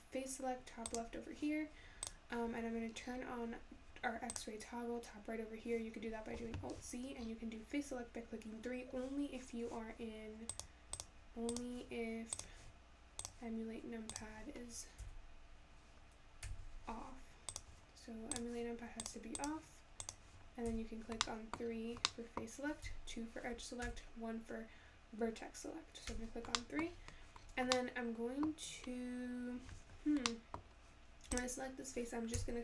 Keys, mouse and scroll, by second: 0.9 click, 2.0 click, 2.9 scroll down 11, 4.3-7.2 drag, 7.2 scroll up 8, 10.5 click, 11.5-14.5 drag, 15.0 KP_3, 16.4 KP_3, 17.5-20.6 drag, 20.7 3, 21.2 scroll up 1, 21.3 middle click, 21.6-22.1 scroll down 4, 22.1 middle click, 22.9 2, 23.9 1, 26.2 3, 26.6 middle click, 26.9-27.4 scroll up 4, 27.4-27.8 scroll down 3, 27.8-29.3 middle drag, 29.3-30.3 scroll down 1, 30.3-31.3 middle drag, 31.3 click, 32.4 g.